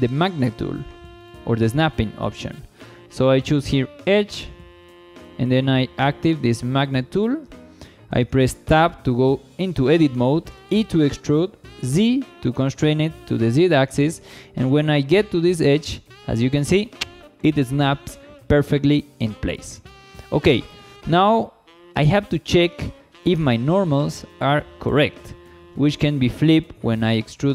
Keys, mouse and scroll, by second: 1.2-5.2 drag, 5.8 click, 7.8 Tab, 10.6 e, 11.8 z, 16.0 click, 18.3 scroll up 2, 18.8 shift+middle click, 20.2 scroll down 1, 20.5 shift+middle click, 21.9-23.3 middle drag, 23.9 KP_1, 25.2 shift+middle click, 26.9-27.5 drag.